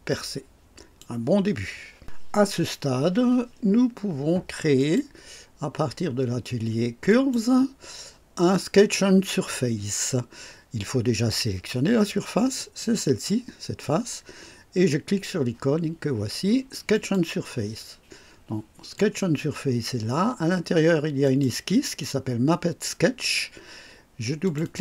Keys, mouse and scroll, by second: 4.7 click, 7.0 click, 8.7 click, 12.5 click, 16.9 click, 18.9 click, 21.2 click, 24.4 click.